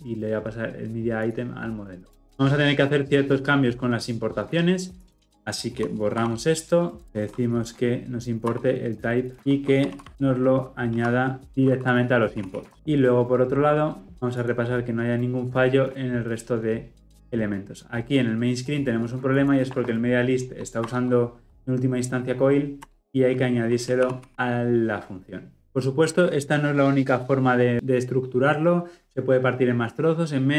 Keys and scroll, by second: 6.1 ctrl+x, 7.0 alt+Return, 12.5 ctrl+alt+o, 20.8 alt+Return, 24.0 ctrl+alt+l, 24.2 ctrl+alt+o.